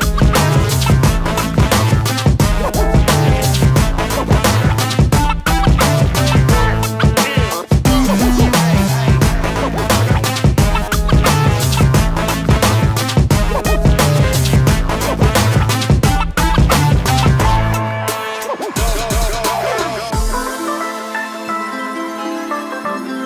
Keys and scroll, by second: 7.2-7.9 typing, 9.0 BackSpace, 9.1 BackSpace, 9.3 BackSpace, 10.9-12.3 typing, 11.6 shift+Return, 12.4 Escape, 16.3 shift+m, 17.9 ctrl+1, 18.1-19.1 typing, 19.3 Escape.